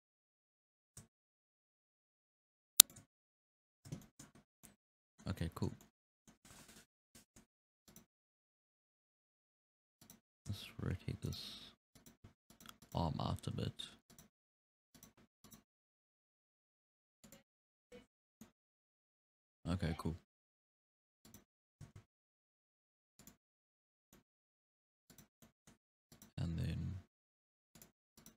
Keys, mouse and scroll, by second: 0.9 g, 3.1-3.5 scroll down 6, 3.5-4.0 scroll up 8, 4.0-4.4 shift+middle drag, 4.4 scroll down 2, 4.7-5.3 middle drag, 5.3 scroll down 1, 5.4-7.0 middle drag, 7.0 KP_1, 7.3 scroll up 3, 7.9 right drag, 8.5 r, 10.4 r, 12.0 right click, 12.3 g, 12.9-13.7 right drag, 13.7 g, 14.5 r, 15.5-15.9 right drag, 15.9 r, 18.2 scroll down 4, 18.5-20.7 middle drag, 20.7-21.3 scroll up 2, 21.3 right click, 21.6 g, 24.0 scroll down 1, 24.1-24.6 middle drag, 24.6-25.2 scroll up 1, 25.2 right drag, 25.4-26.2 middle drag, 26.2 right click, 26.6 g, 28.2 right click.